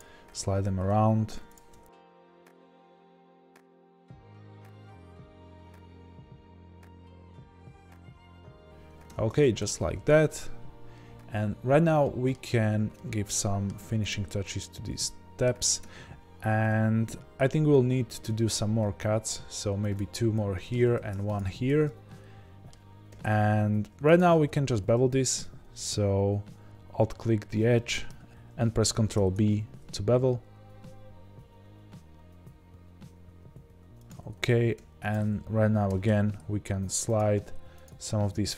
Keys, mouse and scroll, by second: 0.3-1.9 middle drag, 0.3 g, 1.9 click, 2.3-5.8 typing, 2.6 click, 2.9 click, 3.1 click, 3.6 click, 4.0 click, 4.2 click, 4.6 click, 5.1 click, 5.6 click, 6.8 click, 7.3 g, 7.5 click, 7.8 g, 8.1 click, 8.1 g, 8.5 click, 8.5 g, 8.8-9.8 scroll down 3, 9.1 Tab, 9.8 z, 12.0-14.1 shift+middle drag, 14.1 click, 14.5-14.9 scroll up 1, 14.9-17.6 middle drag, 15.8 Tab, 17.6-18.2 scroll down 1, 18.2 ctrl+r, 18.2-24.1 middle drag, 20.9 ctrl+r, 23.0 2, 24.1 alt+click, 27.2-27.7 scroll up 1, 27.7-34.0 middle drag, 28.3 ctrl+b, 34.0 click, 34.7 1, 35.1 click, 35.8 g, 37.8 click.